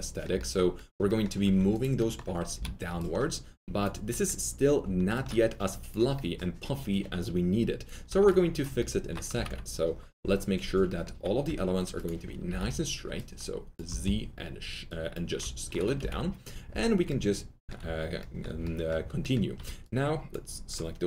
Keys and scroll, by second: 1.4 alt+2, 2.5 s, 9.3 alt+f, 9.4 alt+z, 11.4 2, 12.4 r, 15.9 alt+z.